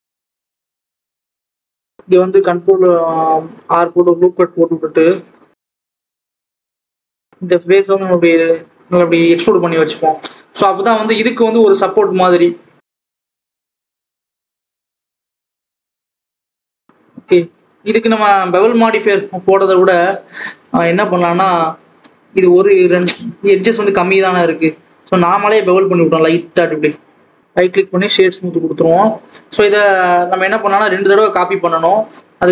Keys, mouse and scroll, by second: 0.0 click, 0.3 scroll up 1, 0.4-0.9 scroll down 2, 0.9 g, 1.5 click, 1.7 alt+a, 2.0 ctrl+r, 5.0 e, 5.9 ctrl+z, 6.1 ctrl+z, 6.5 ctrl+r, 6.9 Escape, 7.0 3, 7.2 click, 7.4 e, 9.7-10.5 scroll down 3, 10.5 click, 11.3-12.5 scroll up 2, 12.5 2, 12.8 click, 13.4 ctrl+b, 14.8 alt+a, 14.9 click, 15.4 ctrl+b, 16.7 alt+a, 16.8 scroll down 2, 16.9 Tab, 17.0 alt+a, 17.3 click, 17.5-18.0 scroll up 7, 18.5 click, 18.8-19.1 scroll up 2, 18.9 Tab, 19.1 alt+a, 20.7 alt+shift+click, 21.1 alt+shift+click, 22.2 ctrl+b, 24.1 ctrl+z, 24.5 ctrl+b, 27.2 right click, 28.2-29.2 scroll down 9, 29.2-29.9 scroll up 2, 30.4 click.